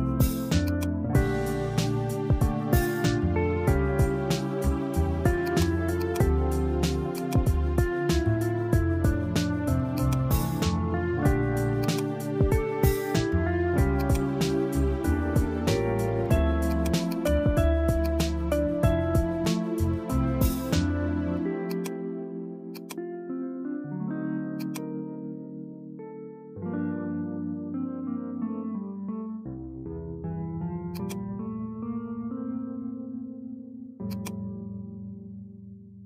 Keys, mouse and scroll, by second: 0.9-3.3 drag, 5.5 click, 6.0 click, 7.2-9.8 drag, 10.1-11.9 drag, 14.2-16.5 drag, 16.7-18.2 drag, 20.3-22.0 drag, 22.9 click, 24.6 click, 28.3-30.0 drag, 30.0 n, 30.9 click, 34.1-36.0 drag.